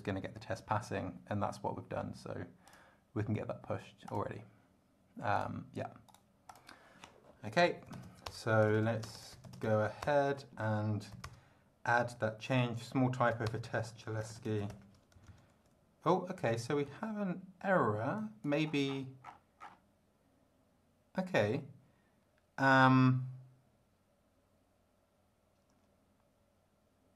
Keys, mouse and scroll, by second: 2.6 click, 4.1 click, 5.3 click, 6.1 right click, 6.5 click, 7.4-10.1 typing, 11.1 n, 11.2 Return, 13.3-14.8 typing, 13.4 Return, 17.0 ctrl+d, 18.1 click, 18.7 scroll up 1, 18.8-19.9 scroll down 5.